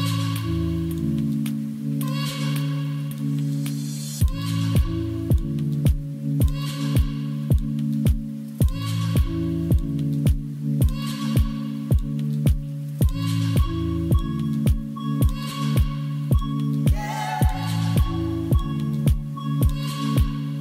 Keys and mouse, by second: 0.7 drag, 1.4 click, 1.9 drag, 2.5 shift+a, 5.8 g, 6.0 z, 7.1 click, 7.7 s, 8.7 middle click, 8.9 shift+middle click, 10.3 click, 10.3 0, 11.4 click, 12.2 shift+d, 12.4 shift+z, 13.3 drag, 13.9 shift+click, 14.1-17.6 typing, 15.3 Return, 17.2 Return, 18.1 middle drag, 18.7 g, 18.8 z, 19.6 s, 20.3 middle click.